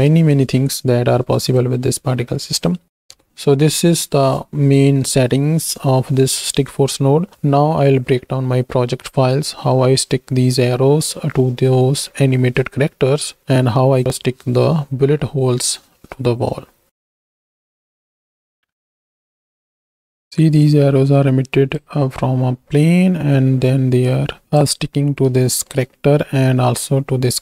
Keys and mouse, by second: 17.4 z, 17.6 z, 18.3 KP_1, 19.3 shift+click, 19.7-21.8 drag, 24.2-24.7 drag, 25.7 shift+drag.